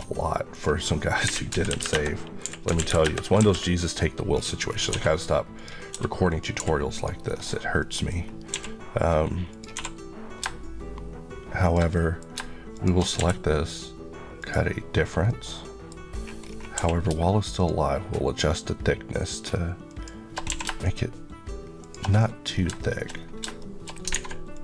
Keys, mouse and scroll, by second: 0.3 click, 1.1-2.6 typing, 1.7 KP_Enter, 2.9 KP_Enter, 4.2-4.7 scroll, 4.7 s, 5.4 click, 6.1 click, 6.5 g, 6.8 right click, 7.2 scroll up 1, 7.6 middle click, 8.4 q, 9.3 click, 9.6 2, 10.3 shift+2, 11.5 shift+click, 11.8 middle click, 12.2-12.6 scroll up 1, 12.6 shift+click, 13.0 q, 14.2 click, 14.9 scroll down 1, 15.1 middle click, 16.0 scroll up 1, 16.6 scroll up 1, 16.6 q, 17.4 shift+click, 19.7 shift+Left, 20.3 q, 20.7 shift+click, 22.0-22.4 scroll down 1, 22.6 shift+middle click, 22.9 shift+scroll up 1, 23.4 shift+middle click, 24.0 alt+a, 24.4 click.